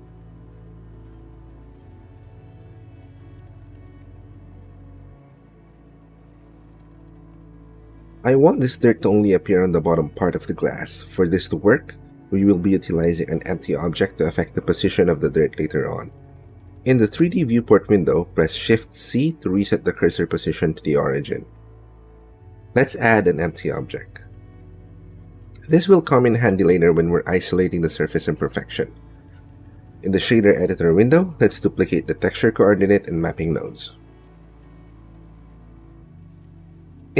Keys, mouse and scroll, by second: 0.2 shift+middle click, 0.9 shift+middle click, 2.6 shift+middle click, 3.3 shift+middle click, 5.7 middle click, 6.4 middle click, 6.8 middle click, 8.7 click, 12.3 ctrl+click, 13.2 shift+click, 13.6 click, 14.3 shift+click, 14.8 click, 15.5 shift+click, 16.7-18.1 middle drag, 19.6 shift+c, 20.4 shift+click, 21.5 shift+click, 22.2 shift+click, 23.3 shift+a, 28.0 click, 30.4 click, 31.1 middle click, 31.6 click, 33.2 click, 33.2 middle click, 33.7 click, 34.4 shift+d, 34.6 y, 36.2 click, 36.4 g, 37.0 y.